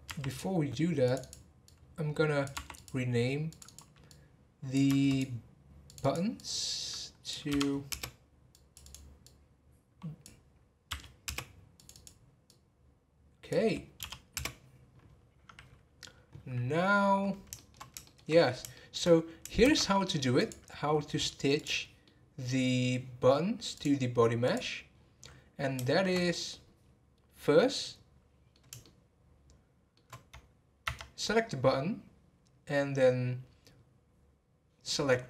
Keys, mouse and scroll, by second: 1.0 click, 3.5 click, 5.8 click, 6.0-8.8 drag, 15.0 click, 15.6 scroll down 3, 16.6 scroll down 4, 17.5-18.3 shift+middle drag, 18.3 scroll up 2, 18.7 shift+middle click, 19.6 shift+s, 21.1 scroll up 2, 21.6 click, 22.0-23.7 middle drag, 23.7-24.9 drag, 24.9-25.3 scroll down 10, 25.9 shift+middle click, 26.2-27.6 scroll up 3, 27.6-30.8 middle drag, 30.8 Tab.